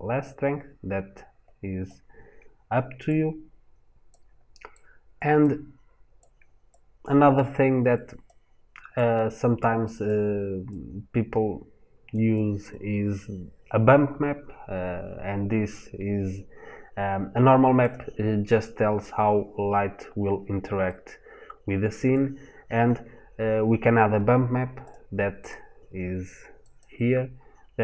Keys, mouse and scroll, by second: 2.9 click, 20.8 middle click.